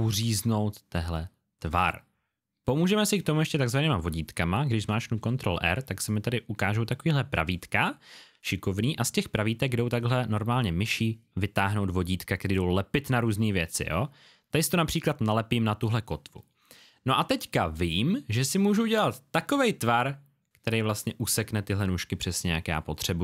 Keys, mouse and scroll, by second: 9.9 click.